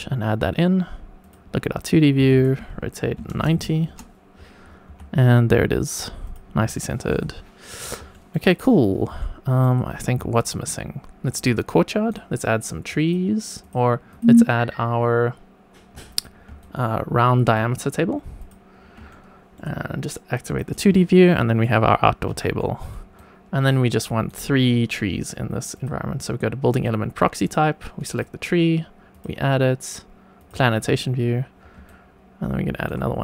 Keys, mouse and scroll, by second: 1.2 click, 2.1 r, 2.3 z, 3.1 KP_9, 3.2 KP_0, 3.8 Return, 4.8 g, 6.2-6.6 drag, 6.7-7.1 shift+middle drag, 7.6 click, 8.1 shift+middle click, 9.2-9.6 shift+middle drag, 10.3-11.2 shift+middle drag, 11.4 shift+right click, 12.9 click, 14.0-16.2 drag, 16.5 shift+right click, 18.3 click, 19.0-19.5 shift+middle drag, 20.4 click, 21.0-21.6 shift+middle drag, 22.5-22.9 shift+middle drag, 23.1 shift+right click, 25.7-26.8 drag, 27.4-28.1 drag, 29.1 click, 30.3 click, 31.8 shift+right click.